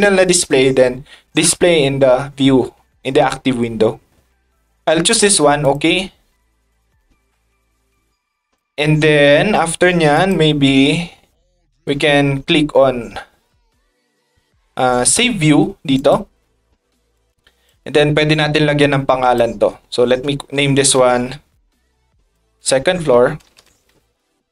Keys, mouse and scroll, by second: 5.6 click, 7.1 middle drag, 7.9-8.5 drag, 10.1 click, 15.9 click, 17.1 click, 19.2 click, 21.9 shift+f.